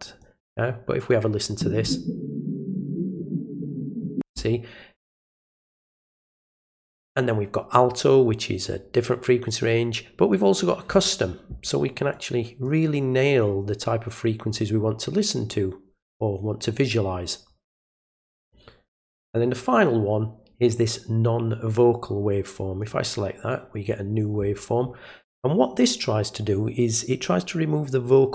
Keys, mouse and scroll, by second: 0.0 click, 0.9 click, 6.0 click, 6.3 right click, 10.2 click, 12.1 click, 13.2-14.5 drag, 18.3 click, 19.3 right click, 22.8 click.